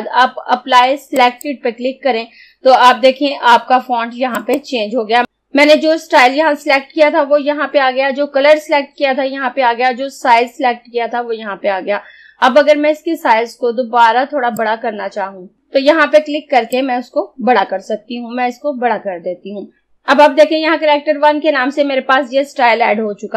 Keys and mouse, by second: 1.3 click, 4.4 click, 14.6-19.3 drag.